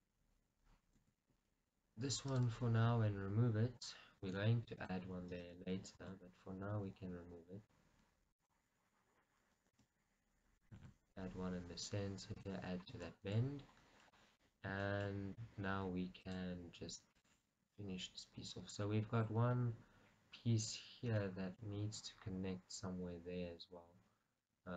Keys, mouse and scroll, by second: 0.0-1.1 middle drag, 13.2 shift+middle click, 14.9-17.3 shift+middle drag, 16.6 click, 17.3 click, 20.6 scroll down 2, 21.4-24.7 middle drag.